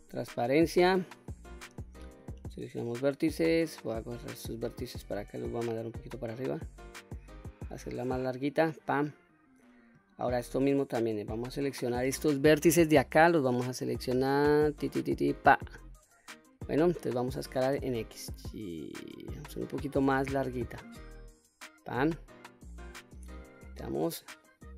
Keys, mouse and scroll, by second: 1.6 1, 2.9-4.3 drag, 5.2-8.8 drag, 10.8-15.3 drag, 17.5 s, 17.8 x, 21.3 click, 22.1 middle click, 22.7 scroll down 1, 23.3 q, 23.6-24.1 scroll down 1, 24.1 middle click.